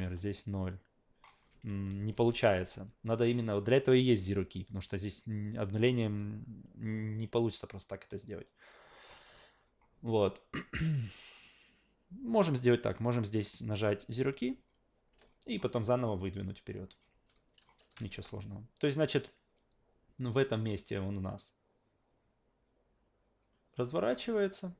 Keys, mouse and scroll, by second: 1.2 alt+middle click, 1.7 ctrl+z, 2.1 ctrl+z, 2.5 ctrl+z, 10.7-13.4 drag, 14.6 click, 15.3 alt+drag, 16.0-17.0 drag, 17.2-17.6 alt+drag, 17.9 a, 20.2-24.1 drag, 24.3-24.7 alt+drag.